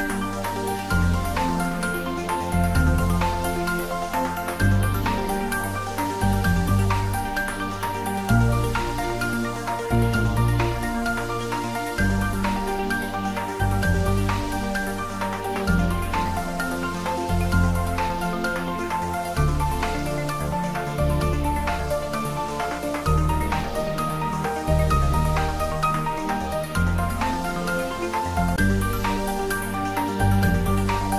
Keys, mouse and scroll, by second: 4.0-5.9 scroll up 1, 7.6 scroll down 1, 10.5 s, 18.6 click, 24.8-26.1 typing, 27.8-29.9 drag, 29.6-30.6 typing.